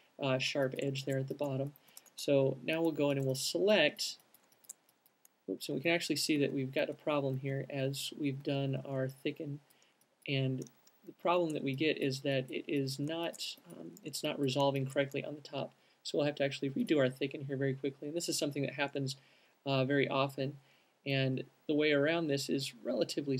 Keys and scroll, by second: 2.2 alt+shift+space, 3.0 space, 4.5 super+z, 6.7 super+z, 7.2 super+z, 8.2-12.4 z, 8.8 super+z.